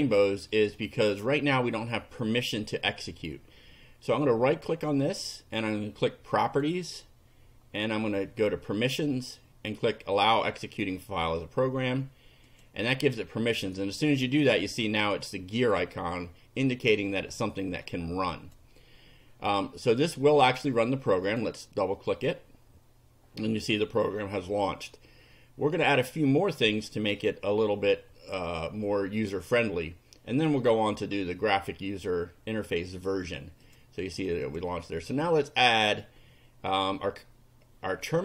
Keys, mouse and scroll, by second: 0.5 right click, 6.4 click, 8.9 click, 10.2 click, 12.5 click, 17.9 click, 21.3 click, 33.7 click, 34.5 click, 35.2 click, 36.7 click.